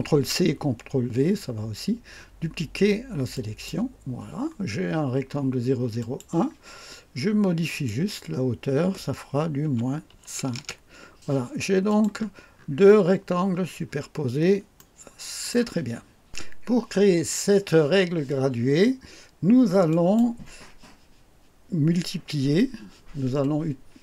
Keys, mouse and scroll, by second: 3.3 click, 5.9 click, 7.7 click, 9.6 KP_Subtract, 10.1 KP_5, 10.5 KP_Enter, 11.8 click, 12.5-12.8 scroll up 2, 13.8-14.1 scroll down 2, 14.7 right click, 19.8 click.